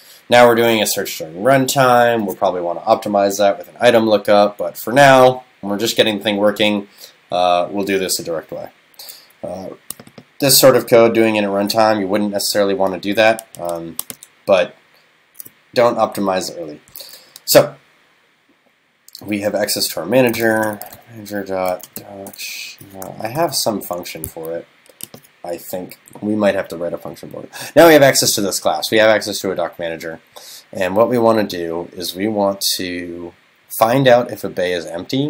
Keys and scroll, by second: 23.8 super+..